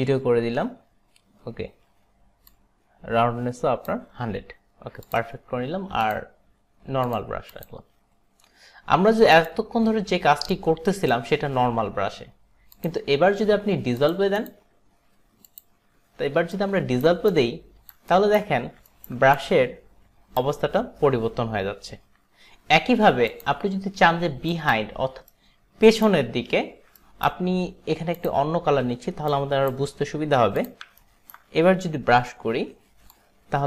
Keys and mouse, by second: 2.6 click, 5.1 click, 6.1 click, 7.6 click, 9.5 click, 10.6 click, 11.7 ctrl+z, 12.8 click, 14.0 click, 14.5 click, 15.6 click, 16.7 alt+right click, 17.4 click, 17.4 alt+right click, 18.3 alt+right click, 19.0 alt+right click, 19.4 click, 23.3 click, 24.5 click, 25.5 alt+right click, 27.1 alt+right click, 28.3 click, 29.4 click, 30.6 click, 31.1 alt+right click, 33.1 click.